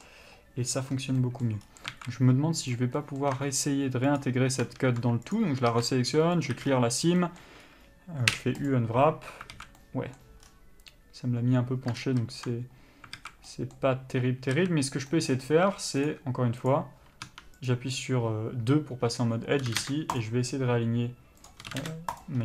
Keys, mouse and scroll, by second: 1.4 middle click, 1.8-2.1 scroll up 1, 2.1 alt+a, 2.8 click, 3.2 middle click, 4.4 ctrl+click, 6.7 ctrl+e, 6.8 a, 6.9-7.4 scroll down 1, 7.4 middle click, 7.8-8.9 scroll up 1, 8.9 u, 9.7 alt+a, 12.2 ctrl+z, 13.4 alt+a, 13.7 middle click, 14.8 a, 16.3 click, 19.9 s, 20.4 click, 21.9 s.